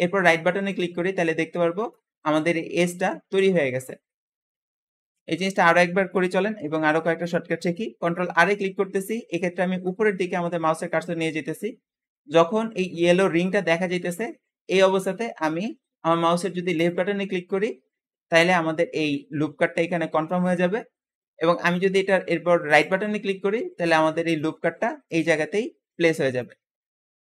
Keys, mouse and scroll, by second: 0.6 click, 1.3-3.1 middle drag, 3.1-4.0 scroll down 4, 4.0-5.2 scroll up 3, 5.2 shift+middle click, 5.7-7.4 scroll up 1, 8.3 ctrl+r, 8.3 ctrl+r, 24.2 click, 24.6 `, 26.4 Escape, 26.5 Escape.